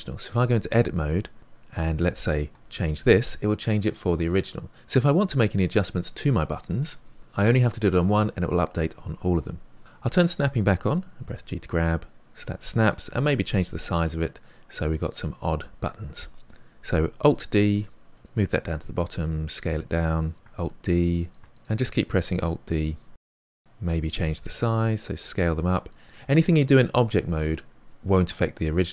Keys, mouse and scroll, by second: 0.2 Tab, 2.5 g, 9.8 Tab, 10.2 click, 11.2 g, 13.1 s, 14.2-17.2 middle drag, 17.2 alt+d, 18.7 s, 20.5 alt+d, 21.0 alt+d, 22.3 alt+d, 23.1 click, 23.3 alt+d, 23.8 alt+d, 24.8 click, 25.3 s, 26.0 drag, 26.2 s.